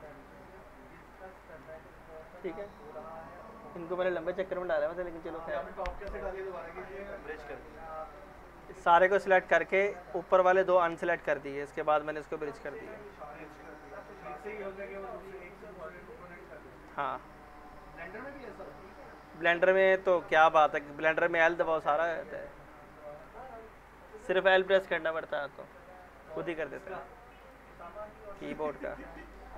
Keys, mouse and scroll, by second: 0.0 alt+middle click, 0.2 middle click, 1.0 click, 1.4 alt+middle click, 6.6 scroll down 1, 6.9 alt+middle click, 7.8 ctrl+z, 8.3 alt+middle click, 12.4 click, 12.9 scroll down 1, 13.1-13.9 alt+middle drag, 15.0-15.6 scroll up 2, 15.6 middle click, 16.1 middle click, 18.0 click, 19.5 Delete, 22.6 Delete, 22.7-23.3 alt+middle click, 23.4 scroll down 1, 23.8 middle click, 23.9 middle click, 27.4 click, 29.1 middle click.